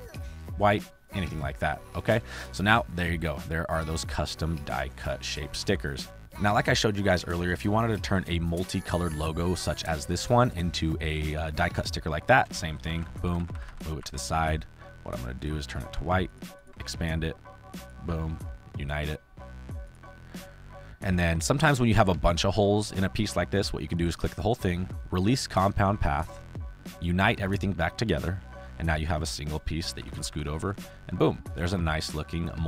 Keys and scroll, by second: 2.1 space, 5.2 space, 10.3 space, 12.9 ctrl+c, 13.2 ctrl+b, 13.4 Right, 16.7 ctrl+q, 29.2 space, 29.9 Left, 32.1 space.